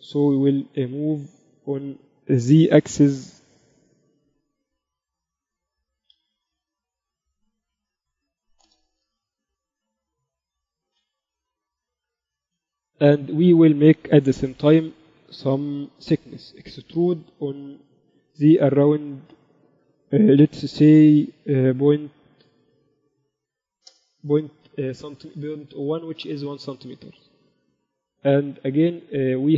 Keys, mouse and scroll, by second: 0.5 KP_1, 1.5 z, 3.1 g, 9.9 z, 10.2 z, 12.0 KP_7, 12.7 Tab, 13.0 a, 13.3 a, 16.7 e, 27.2 Tab, 28.3 KP_1.